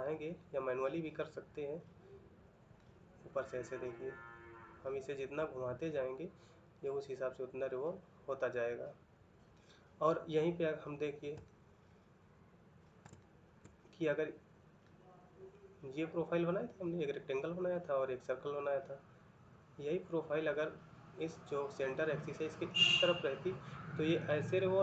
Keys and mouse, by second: 2.6 middle click, 11.3 ctrl+middle click, 14.7 middle click, 18.5 middle click.